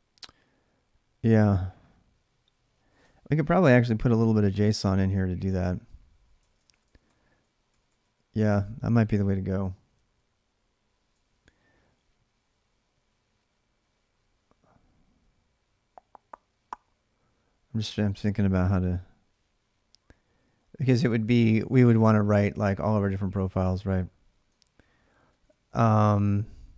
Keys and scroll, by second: 4.3 ctrl+[, 4.4-7.8 typing, 10.4-10.8 j, 23.5-25.8 typing.